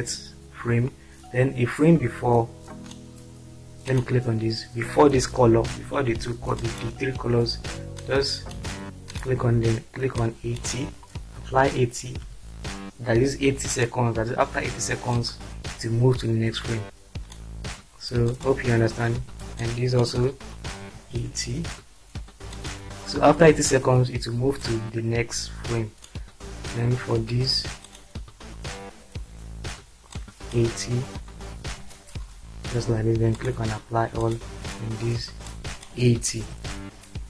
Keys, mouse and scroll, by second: 0.3-0.8 drag, 0.9-2.9 drag, 6.6 click, 8.0 drag, 10.2 click, 12.0 typing, 13.7 click, 15.3-17.3 drag, 19.6 click, 20.9 typing, 22.5 click, 24.6-26.1 drag, 30.1 click, 31.6 typing, 33.3 click, 34.3 click, 35.6 click, 36.5 typing.